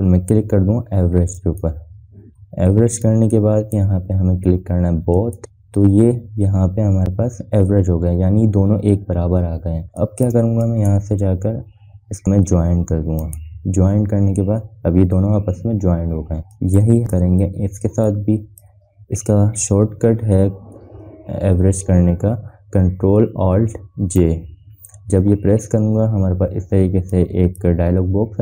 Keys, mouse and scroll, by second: 2.0-4.6 drag, 6.6 scroll up 1, 10.1 scroll down 1, 10.5 space, 10.7 click, 11.4 right click, 14.0 click, 15.1 scroll up 1, 16.7 scroll down 2, 17.1 space, 17.3 click, 17.3 scroll up 1, 17.5 space, 17.7 click, 18.0 scroll up 1, 18.8-19.4 drag, 24.1 ctrl+alt+click, 24.9 ctrl+alt+j, 27.9-28.4 drag.